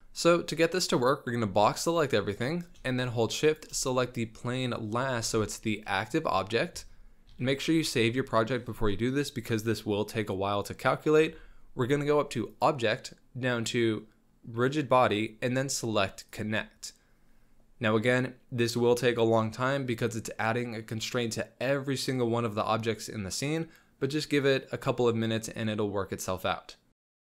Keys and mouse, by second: 0.0 z, 1.0-2.3 drag, 3.5 shift+click, 5.2 z, 5.5 drag, 5.7 middle click, 7.3 ctrl+s, 12.5-27.3 drag.